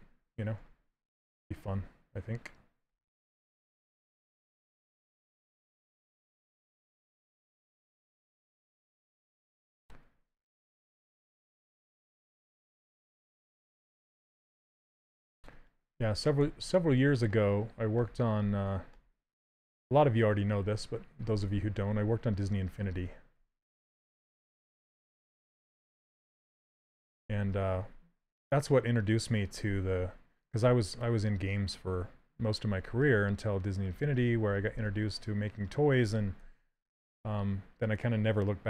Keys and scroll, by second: 0.3 s, 23.8 s, 32.6 s.